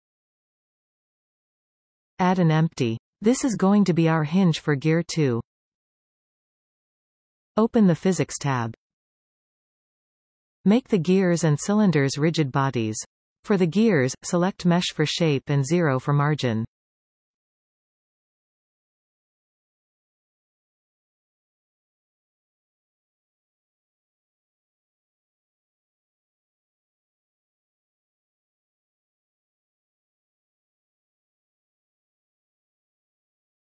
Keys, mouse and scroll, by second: 1.0 g, 3.4 shift+a, 6.1 s, 10.4 click, 12.4 click, 13.8 click, 15.7-19.4 drag, 19.5 click, 21.3-24.2 drag, 25.5 click, 28.1-33.6 drag.